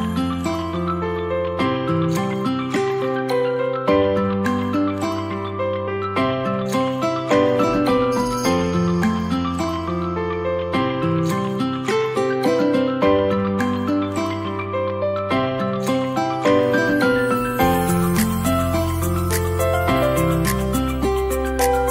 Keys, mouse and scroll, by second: 0.2 scroll down 1, 0.4-0.8 middle drag, 1.2 shift+a, 3.8 click, 4.3-5.1 drag, 8.2-10.0 drag, 10.5-10.9 middle drag, 11.4 g, 12.0 z, 13.8 click, 14.1 g, 15.7 y, 17.1 click, 17.5 r, 17.8 x, 19.0 click, 20.5 KP_7.